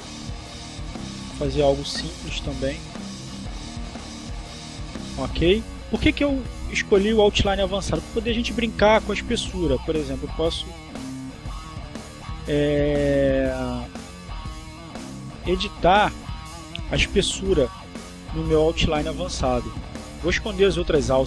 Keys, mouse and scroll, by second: 0.0-1.1 drag, 1.2-2.5 drag, 2.6-3.7 drag, 4.7 click, 7.4 click, 9.2 click, 10.8-13.1 drag, 14.5-16.0 drag, 21.1-21.2 drag.